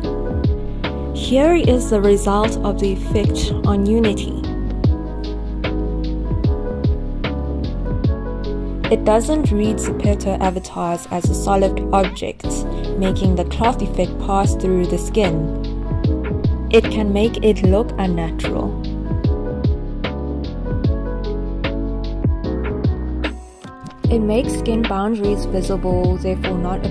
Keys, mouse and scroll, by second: 23.8 click, 24.0 click, 26.1 click.